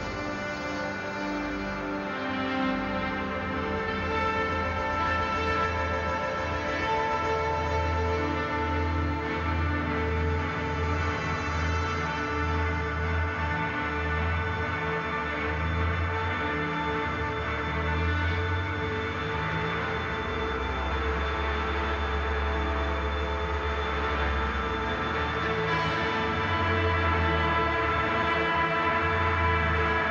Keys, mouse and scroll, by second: 2.1 click, 4.8 Return, 5.4-7.9 drag, 7.9 click, 8.6 ctrl+-, 9.4 click, 10.3 g, 10.9 click, 13.5 click, 13.8 right click, 14.2 click, 17.9 shift+Right, 18.9 click, 19.2 shift+Left, 20.4 click, 20.9 shift+Left, 21.9 click, 22.2 shift+Right, 23.2 click, 24.2 shift+Down, 25.1 click, 25.4 shift+Up, 26.5 click, 27.2 shift+Down, 28.4 click, 28.7 shift+Up, 29.8 click.